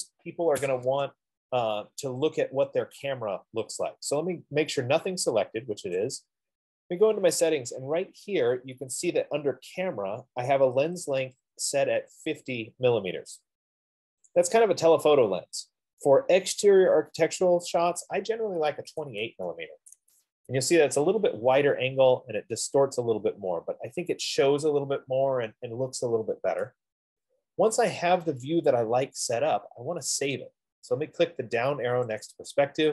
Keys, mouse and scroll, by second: 1.2 Escape, 6.4-11.4 drag, 14.7-19.6 drag, 19.2 typing, 20.3 Tab, 22.3 middle click, 23.1 middle click, 24.0 typing, 32.6-32.9 drag.